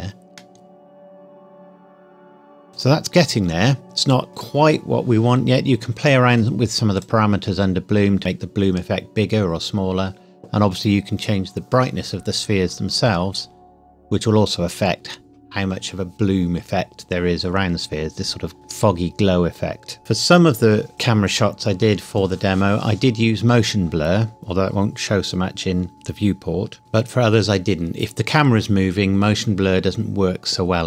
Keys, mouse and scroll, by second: 0.3 middle click, 2.7-3.0 scroll down 1, 6.9 click.